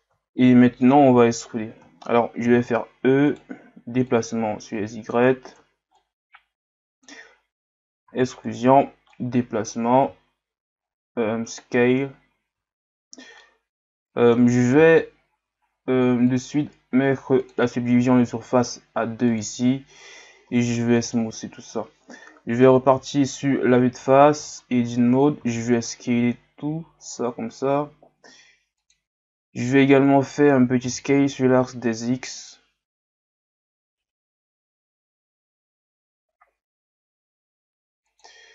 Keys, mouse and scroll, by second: 0.8 scroll up 1, 1.5-2.0 scroll down 1, 2.1-2.5 scroll down 1, 2.5 e, 4.1 click, 5.4 ctrl+z, 6.0-8.1 drag, 8.1 e, 9.1 click, 10.0 s, 12.8 scroll down 1, 13.4-15.4 middle drag, 15.4 Tab, 17.5-20.5 drag, 20.5 w, 22.9 KP_1, 24.0 Tab.